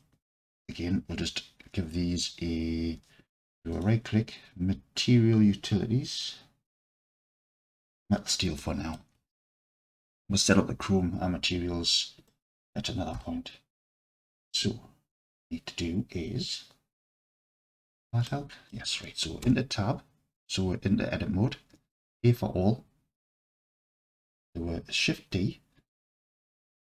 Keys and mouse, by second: 3.7-7.5 drag, 8.6-9.0 middle drag, 12.4 middle drag, 13.1 KP_1, 14.0 drag, 17.4 click, 18.3-18.7 drag, 19.4 Tab, 22.0 a, 23.5 click, 26.4 shift+d.